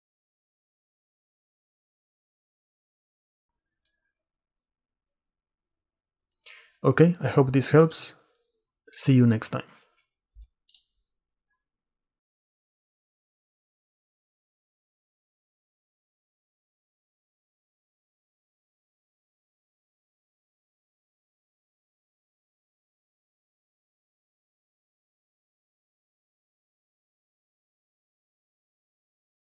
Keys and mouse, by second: 0.8 click, 2.0 middle click, 2.8 drag, 8.4-9.5 drag, 11.6-12.1 drag, 13.5 middle click, 14.1-15.2 drag, 16.6 click, 17.4-18.6 drag, 18.9 middle click, 19.8 shift+middle click, 20.2 shift+click, 21.0 shift+middle click, 21.5-23.1 shift+middle drag, 23.1 shift+click, 23.4 shift+middle click, 23.5 shift+click, 23.6 shift+middle click, 23.7 shift+click, 23.8 shift+click, 23.9 shift+middle click, 24.7 shift+click.